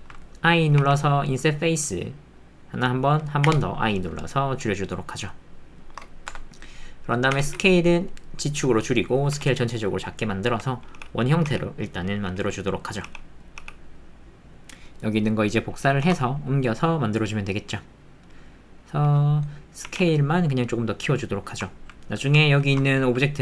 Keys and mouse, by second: 7.4 s, 7.4 z, 9.3 s, 10.3 alt+click, 10.9 g, 12.3 s, 13.0 g, 14.6 alt+z, 14.6 x, 14.6 shift+d, 16.0 shift+d, 18.7-19.8 middle drag, 19.8 s, 21.2 middle click, 21.7 ctrl+middle click, 22.1 alt+middle click, 22.7 shift+middle click, 22.8 ctrl+middle click, 23.2 middle click.